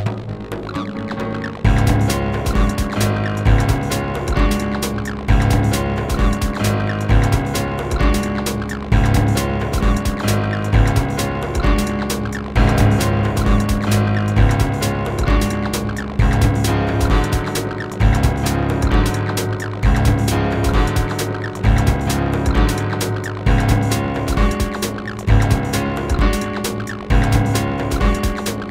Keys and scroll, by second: 3.4 space, 16.1 ctrl+z, 17.3 w.